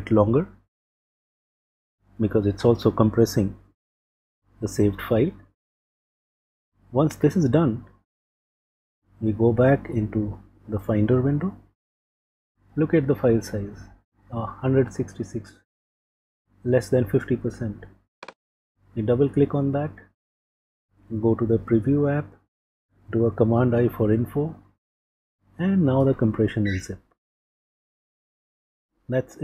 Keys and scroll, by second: 8.6 super+Tab.